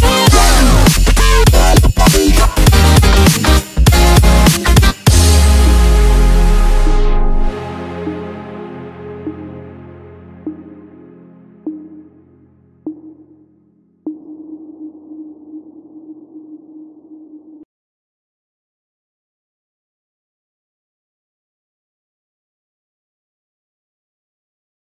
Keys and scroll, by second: 12.5 ctrl+0.